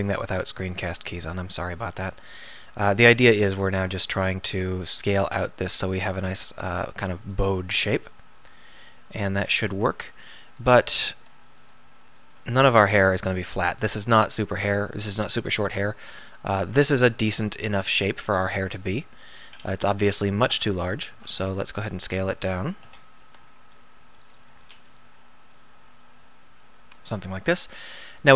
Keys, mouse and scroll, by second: 1.6-3.4 middle drag, 3.8 alt+., 4.6 s, 18.3 Tab, 19.1 middle click, 20.6 Tab, 21.1 a, 21.8 s, 22.9 ,, 22.9 ., 24.7 s.